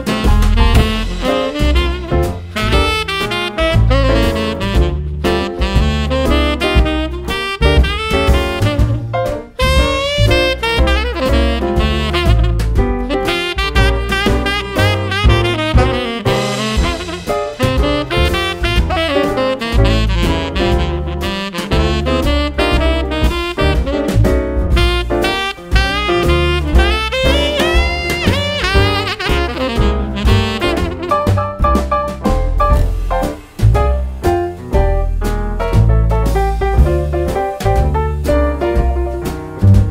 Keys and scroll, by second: 7.0 Left, 7.2 Left, 19.8 ctrl+v, 20.1 super+c, 20.3 super+v, 27.7 Left, 27.8 Left, 35.5 ctrl+d, 36.3 super+d.